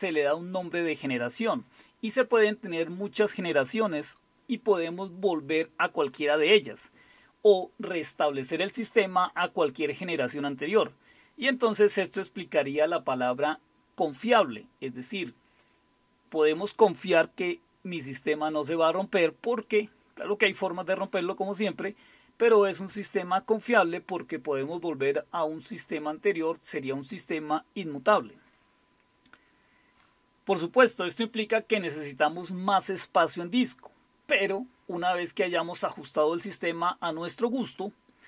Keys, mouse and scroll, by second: 13.9-15.1 typing.